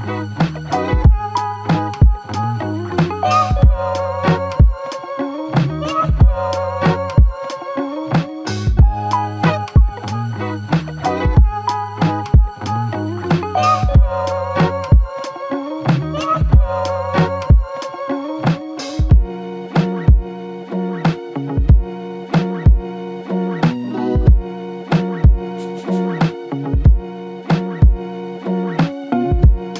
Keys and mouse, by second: 10.5 double click, 17.2 alt+click, 18.2 alt+click, 20.1-20.9 typing, 23.1 double click, 24.3 alt+click, 25.4-26.1 s, 28.0 s, 28.1 double click.